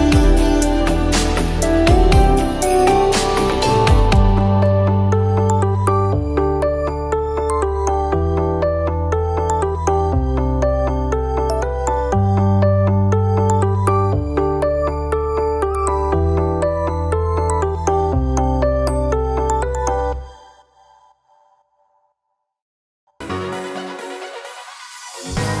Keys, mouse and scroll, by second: 0.1 click, 2.2-4.9 drag, 5.1 click, 12.1 click, 15.8 ctrl+a, 16.5 ctrl+c, 17.0 click, 17.8 ctrl+v, 18.5-20.4 drag, 20.4 Up, 21.1 click, 22.2 click, 23.9-25.6 drag.